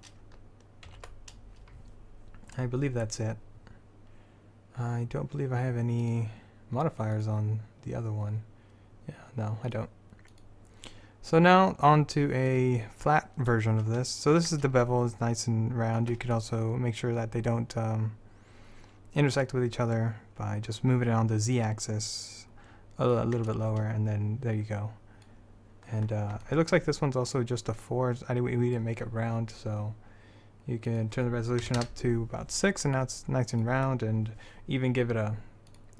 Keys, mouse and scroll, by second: 1.1 alt+a, 3.8 middle click, 6.2-12.1 drag, 12.1 middle click, 12.6-14.1 drag, 14.1 middle click, 15.8-18.6 middle drag, 19.5-23.3 drag, 28.3 middle click, 31.0-33.2 drag, 33.2-35.8 middle drag, 35.8-35.9 drag.